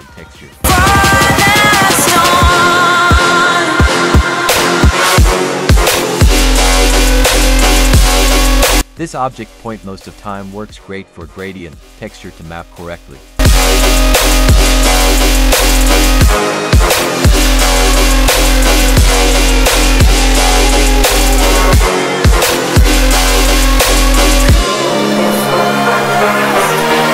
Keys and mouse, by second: 0.8-3.3 drag, 3.8-5.2 drag, 5.8 click, 6.8 click, 7.8 drag, 10.2-13.1 drag, 13.4 middle drag, 15.2 click, 17.0 click, 17.7-18.2 drag, 18.4-21.1 drag, 25.9-27.1 drag.